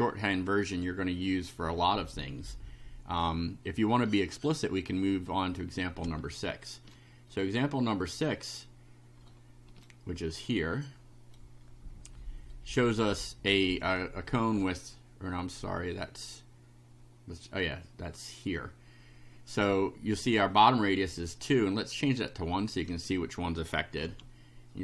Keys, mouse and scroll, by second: 4.9-5.9 drag, 6.4 shift+right click, 7.3-8.5 shift+right drag, 8.7 scroll up 1, 9.3 shift+right click, 10.7 right click, 12.6 right click, 13.7 click, 22.4 click, 22.9 1, 24.0 F5.